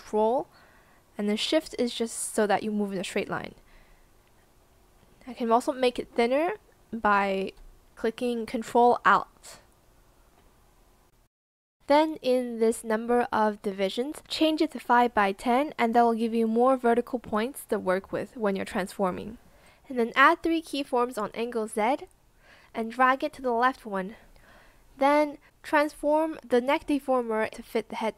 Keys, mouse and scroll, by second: 8.4 ctrl+alt+click, 27.9 shift+click.